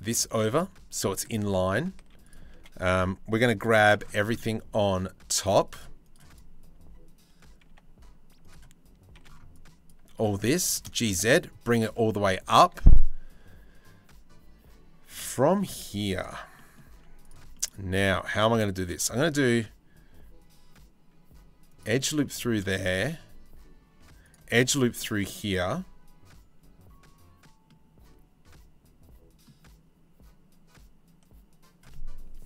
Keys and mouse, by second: 1.0 shift+middle click, 1.6 z, 2.1 1, 3.4 c, 5.9 right click, 7.3 v, 8.7 c, 10.2 g, 15.4 z, 16.5 z, 18.4 ctrl+r, 22.5 ctrl+r, 24.3 click, 25.5-27.2 drag, 27.2-29.0 middle drag.